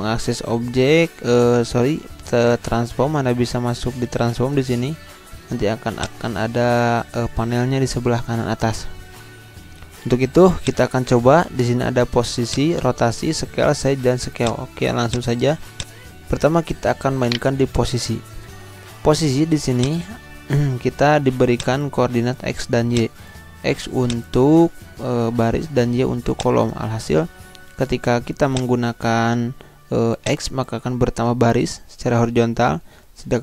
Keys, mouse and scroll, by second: 5.9 click, 10.5-17.2 drag, 17.2 shift+right click, 19.7-24.0 drag, 25.5 0, 26.3 click, 26.7-27.7 typing, 28.5-33.1 drag.